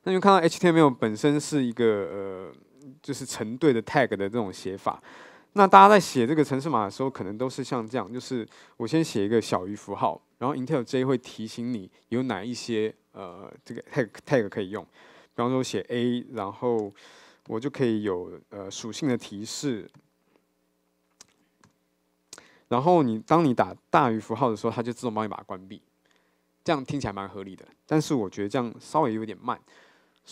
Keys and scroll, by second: 16.9 Return.